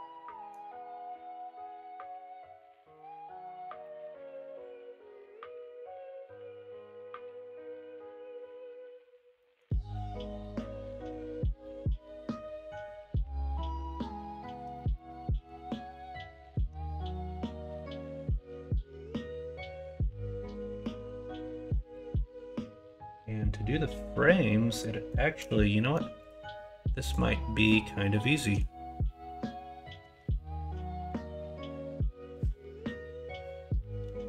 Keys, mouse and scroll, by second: 13.4 middle click, 14.6 Tab, 14.9 middle click, 15.7 middle click, 18.0 middle click, 19.4 middle click, 21.6 3, 24.4 shift+middle click.